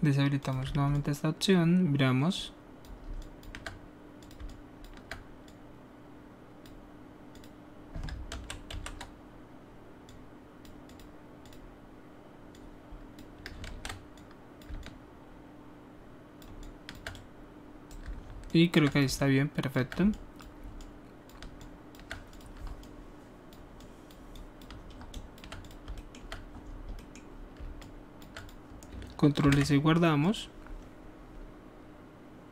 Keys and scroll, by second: 8.3 ctrl+z, 8.7 ctrl+z, 13.6 ctrl+z, 25.8 typing, 29.4 ctrl+alt+s.